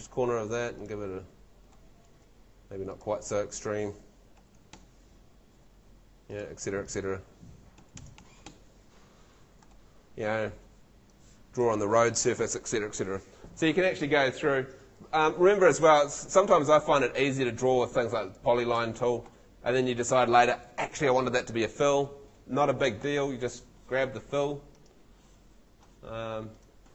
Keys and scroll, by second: 2.1 super+z, 4.1-5.1 typing, 5.4 Escape, 7.5-8.7 typing, 9.3 Escape, 15.8 Escape, 19.3 Escape, 23.0 Escape.